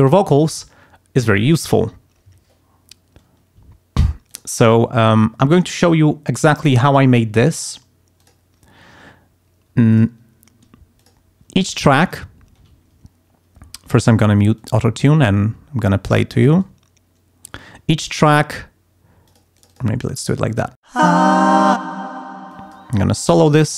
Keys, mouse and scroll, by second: 4.3 click, 6.8 click, 7.4 click, 8.2 click, 9.9 click, 11.0 click, 11.8 click, 12.3 ctrl+scroll up 2, 13.8 click, 14.5 click, 15.0 click, 16.3 click, 18.1 click, 19.3 click, 19.6 click, 20.9 space, 21.9 space, 22.5 click, 22.8 click.